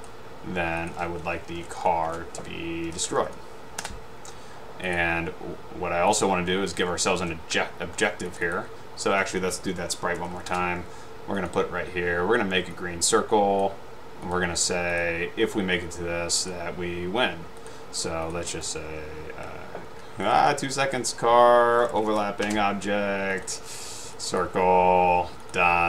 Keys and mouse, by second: 0.9 click, 1.6-3.2 typing, 5.0 click, 7.9 middle click, 9.7-11.0 typing, 11.6 click, 13.2-14.1 drag, 16.5 click, 18.4 click, 18.8 drag, 20.3 click, 20.5 click, 21.6-22.7 typing, 24.2 click, 25.5 click.